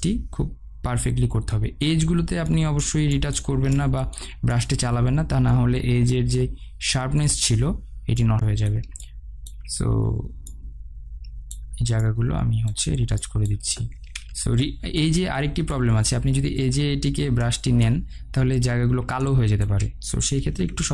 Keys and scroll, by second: 14.9 ctrl+z.